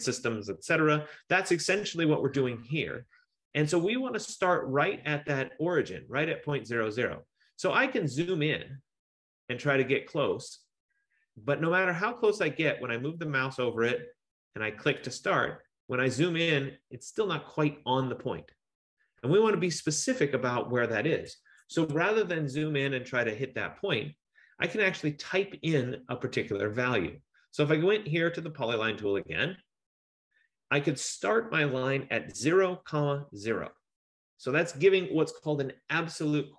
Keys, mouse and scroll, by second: 5.3-6.5 scroll, 6.5-7.7 scroll, 7.7-8.8 scroll, 8.8-13.1 scroll, 13.1 F15, 15.1 F15, 15.2 click, 15.9-17.0 scroll, 17.0-18.0 scroll, 18.1-18.9 scroll, 21.9 Escape, 22.5-26.3 scroll, 28.8 click, 32.5-33.5 typing.